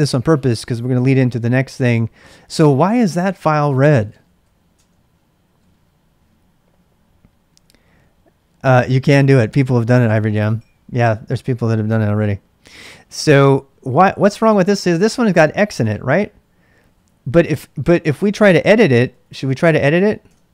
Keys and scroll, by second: 3.7-4.8 typing, 18.3-19.5 typing, 20.2 Return.